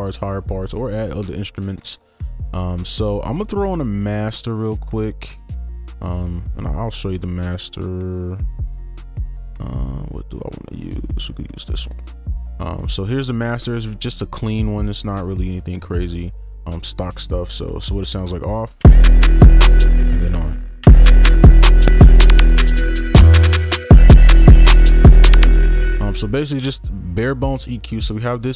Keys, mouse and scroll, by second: 5.6 right click, 18.8 space, 19.9 space, 25.4 space.